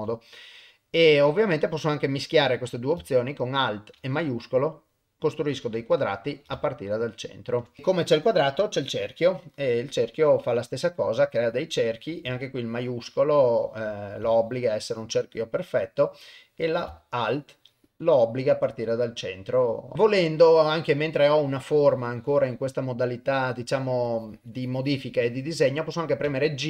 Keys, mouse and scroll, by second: 2.0-5.6 drag, 6.4-7.8 alt+shift+drag, 8.7 click, 9.4-13.4 drag, 14.0-16.0 shift+drag, 16.4-26.6 drag.